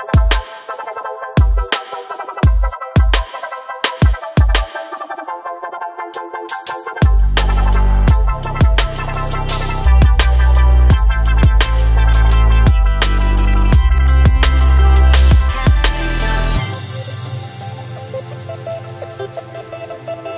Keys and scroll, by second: 5.2 ctrl+r, 10.1 ctrl+r.